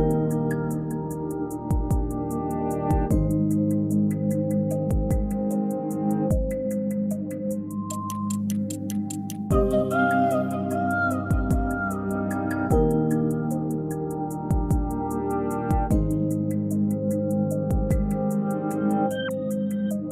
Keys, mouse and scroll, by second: 1.3 scroll down 1, 1.5 s, 4.3 click, 6.0-9.0 drag, 10.3 click, 14.2 click, 18.1-20.1 drag.